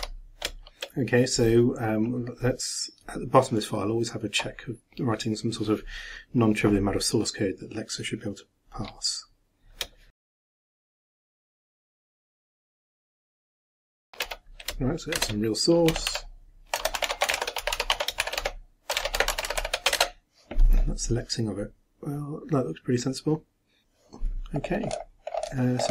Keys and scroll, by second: 10.0-14.1 typing, 11.7 shift+Return, 15.2 shift+Return, 17.1-19.5 typing, 20.0 shift+Return.